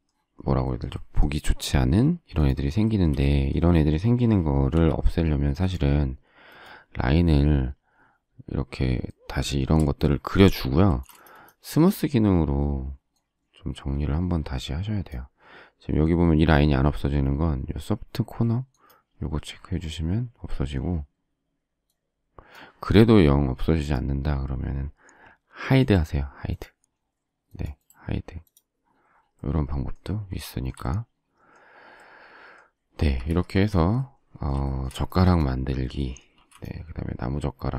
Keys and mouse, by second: 4.7 l, 9.7 space, 9.8 space, 10.8 space, 15.3 click, 16.4 click, 19.4 click, 20.8 click, 22.5 click, 33.0 space, 33.1 Escape, 33.5 Escape, 36.3 m.